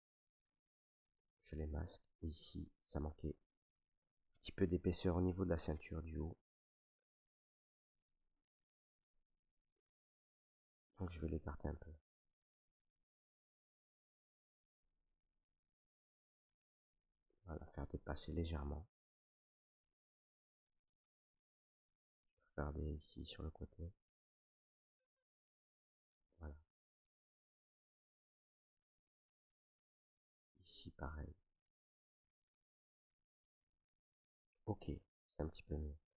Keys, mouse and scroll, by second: 0.7 right click, 1.4 right click, 2.8 right click, 3.3 click, 3.8 alt+right click, 4.7 right click, 5.3 alt+right click, 5.8 s, 6.8 click, 7.6 s, 9.1 click, 10.8 click, 11.5 click, 11.6 right click, 13.2-14.8 drag, 14.8-15.9 right drag, 15.5 click, 17.1 click, 17.1 right click, 17.8 click, 18.8 right click, 19.3 click, 20.1 click, 20.8 alt+right click, 21.7 right click, 23.4 click, 24.8 click, 25.8 right click, 26.9 click, 28.7 right click, 29.8-32.1 right drag, 32.1 click, 34.2 right click, 35.9 right click.